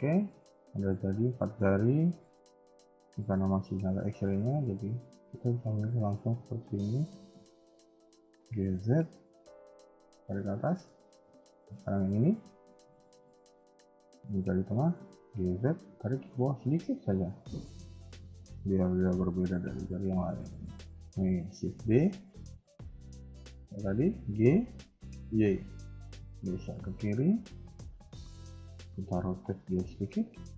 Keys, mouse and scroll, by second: 0.0 KP_1, 0.4 KP_3, 0.8-1.4 scroll up 2, 1.1 Tab, 1.5 shift+middle click, 1.9 z, 4.3 a, 4.5 a, 4.7 b, 7.0 b, 8.2 g, 10.3-10.6 scroll down 2, 10.6 shift+middle click, 10.9-11.3 scroll up 2, 11.3 Tab, 11.5 click, 11.9-12.8 scroll down 2, 12.2 Tab, 12.8 b, 14.5 g, 17.2 scroll down 1, 17.4 shift+middle click, 17.8-19.1 scroll up 1, 19.6 Tab, 20.4 click, 22.5 shift+d, 29.1 r.